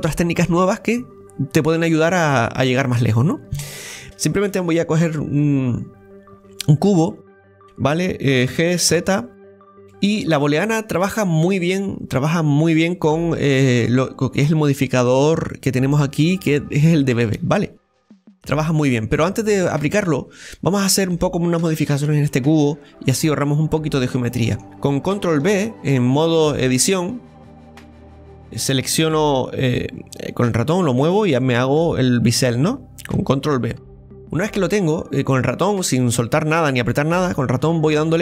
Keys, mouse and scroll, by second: 1.9-3.6 scroll up 2, 2.4-3.6 middle drag, 3.6 scroll up 2, 3.8 shift+middle click, 6.7 shift+a, 7.2-8.5 scroll down 1, 8.5 g, 10.1 scroll up 1, 10.4-11.5 scroll down 1, 11.5 click, 11.9 scroll down 1, 12.2-13.3 middle drag, 13.3-13.7 scroll up 1, 13.7-15.1 shift+middle drag, 15.1-18.1 drag, 19.7 click, 20.4-21.6 middle drag, 21.6 Tab, 22.1 scroll up 1, 22.3 middle click, 23.2 click, 23.9 right click, 24.3-25.9 middle drag, 26.8 ctrl+b.